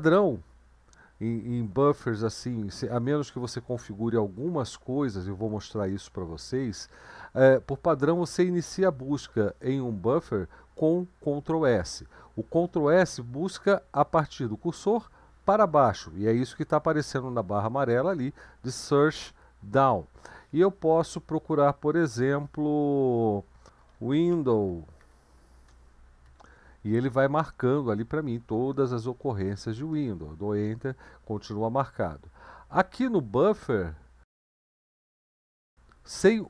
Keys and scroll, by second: 23.4-26.3 typing, 29.9 Return.